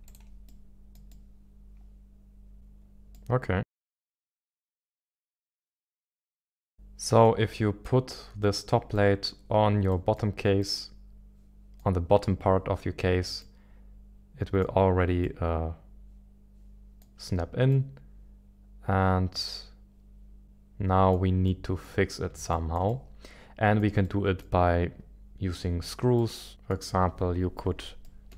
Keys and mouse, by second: 0.4-2.5 middle drag, 3.1-5.4 middle drag, 6.4 middle click, 7.8 middle click, 9.0 middle drag, 9.9 middle click, 11.0 middle click, 13.4-14.9 middle drag, 15.2-17.4 middle drag, 17.7-21.1 middle drag, 21.4 middle click, 22.5-23.8 shift+middle drag, 24.0-24.5 middle drag, 26.1-26.7 middle drag, 28.0-28.3 shift+middle drag.